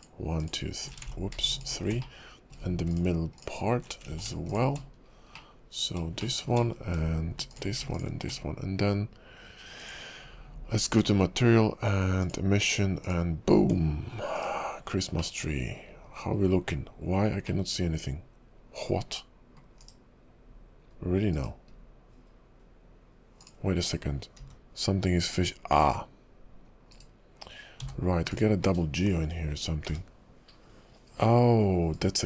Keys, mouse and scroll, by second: 0.4 alt+shift+click, 1.2 ctrl+z, 1.5 alt+shift+click, 2.2 middle click, 2.9 alt+shift+click, 3.4 alt+shift+click, 4.2 ctrl+z, 4.5 shift+click, 5.0-5.4 scroll down 8, 5.5 middle click, 6.4 shift+middle click, 6.8 scroll up 4, 7.5 alt+shift+click, 7.9 shift+click, 9.8 click, 13.0 click, 13.6 Tab, 14.2 scroll down 6, 14.5 /, 15.3 middle click, 16.1 KP_5, 16.5-17.6 scroll up 4, 17.6 middle click, 19.8 /, 21.0-21.3 scroll up 3, 21.3 /, 21.9-23.5 scroll up 2, 23.5 click, 24.4 g, 27.8 h, 28.3 click, 28.8-29.9 scroll down 4, 29.9 g.